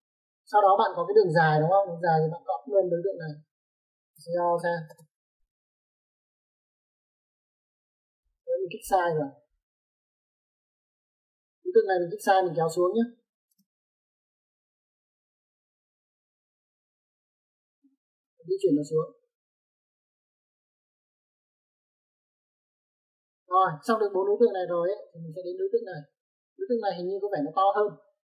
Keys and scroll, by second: 0.2 typing, 4.2-4.9 typing, 11.4 space, 13.4 m, 13.6 space, 17.6 space.